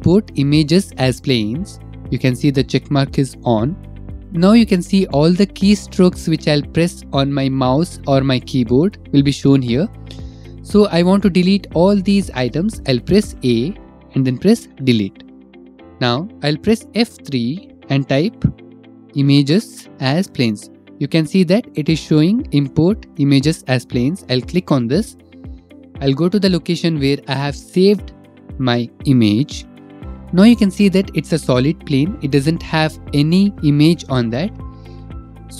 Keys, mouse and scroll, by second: 1.9 click, 3.7 middle click, 4.2 click, 4.8 middle click, 5.1 middle click, 12.0 middle click, 13.2 a, 14.8 Delete, 15.9 middle click, 17.1 F3, 19.0-19.9 typing, 20.5-20.9 scroll, 24.3 click, 26.0 click, 27.5 click, 27.6 click, 28.1 click, 28.3 click, 28.8 click, 29.2 click, 29.4 click, 30.0-30.4 scroll, 31.9-32.9 scroll, 33.2 middle click.